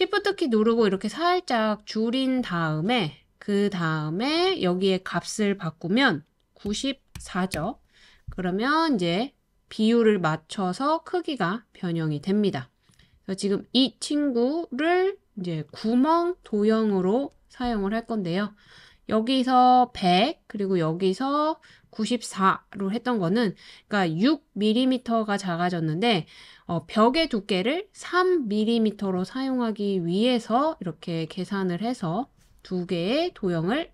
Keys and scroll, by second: 6.7-7.2 typing, 7.5 Return.